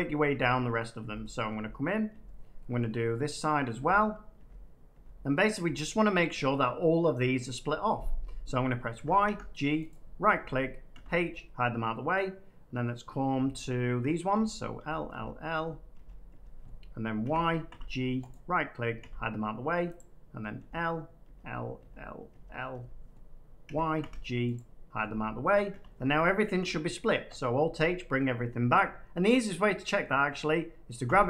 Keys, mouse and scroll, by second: 0.2 l, 0.9 l, 1.5 l, 2.0 l, 2.7 middle click, 4.3 l, 4.8 l, 5.5 l, 8.9 y, 9.2 g, 9.8 right click, 10.9 h, 14.2-17.6 typing, 18.2 right click, 18.9 h, 19.9 click, 20.5 l, 21.7-23.9 typing, 24.5 right click, 25.6 h, 27.2 alt+h, 28.1 middle click, 29.7 scroll down 1, 30.0 middle click, 31.0 a.